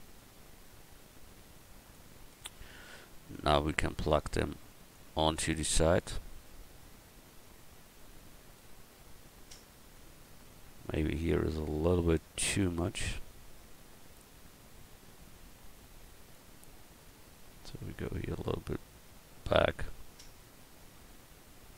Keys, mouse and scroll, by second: 2.3 Tab, 3.3-4.9 drag, 5.3 middle click, 8.0-9.5 middle drag, 9.7-10.7 middle drag, 11.0 Tab, 13.2-16.1 drag, 18.0-21.0 drag, 18.0 right click, 20.8 Tab, 21.0 middle click.